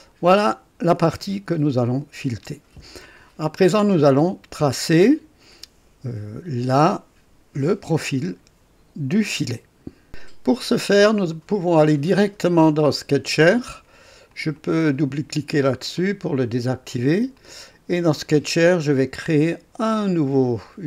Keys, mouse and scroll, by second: 1.8 click, 13.1 click, 14.2 click, 15.9 click, 17.3 click, 19.1 click.